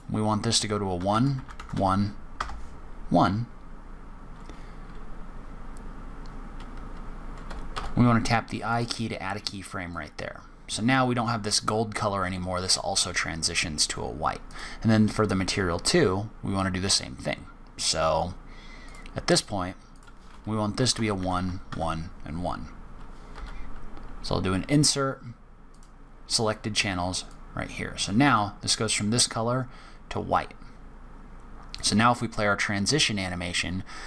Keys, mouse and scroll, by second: 9.9 click, 14.4 click, 18.8 click, 26.1 scroll down 5, 26.7-27.3 scroll up 1, 27.3 click, 27.3 scroll up 1, 33.9 click.